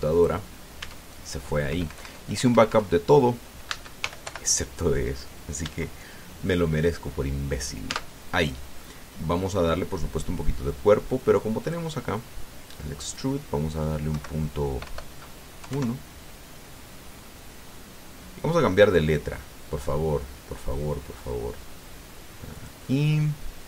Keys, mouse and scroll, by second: 1.6 Tab, 2.5 BackSpace, 4.5 Caps_Lock, 4.8 g, 5.1 o, 6.4 Caps_Lock, 8.7 Tab, 9.6-10.9 drag, 12.4 click, 13.9 click, 14.9 Right, 15.6 BackSpace, 16.4 KP_1, 16.5 KP_Enter, 18.0-19.9 drag, 20.6-21.0 scroll down 1, 23.4 click.